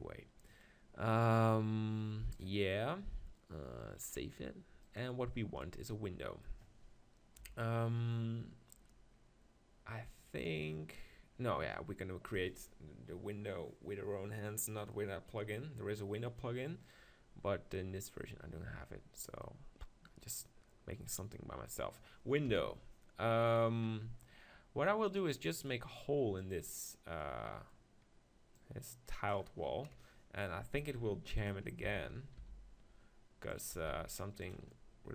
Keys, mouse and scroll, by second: 4.3-5.8 drag, 5.6-7.4 middle drag, 7.4 KP_1, 11.3-14.5 middle drag, 14.9-21.3 middle drag, 22.5 KP_1, 23.5-25.4 middle drag, 25.4-26.9 drag, 27.0 click, 27.2-28.6 middle drag, 28.6-29.9 drag, 29.9 KP_7, 30.7 g, 31.8 s, 33.9 g, 34.5-35.1 drag.